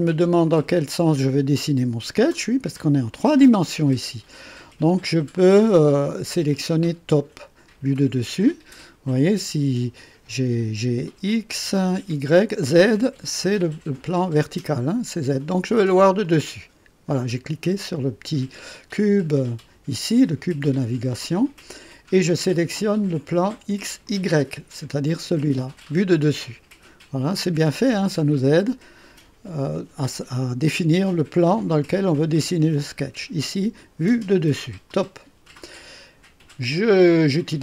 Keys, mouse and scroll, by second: 0.4-2.5 drag, 3.0-4.7 drag, 5.3 click, 9.1-10.0 drag, 16.2 click, 24.0 click, 34.8 click.